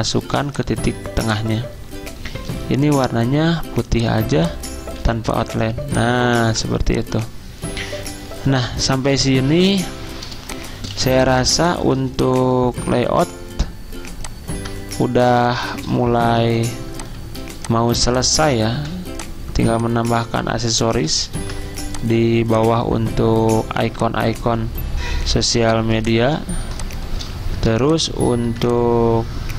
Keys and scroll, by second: 0.3 z, 2.6 d, 5.0 z, 6.2-6.9 typing, 13.2 l, 16.4 i, 17.8-18.8 typing, 21.4 ctrl+d, 25.4 ctrl+f, 25.8 z, 27.4 ctrl+z, 27.8 v.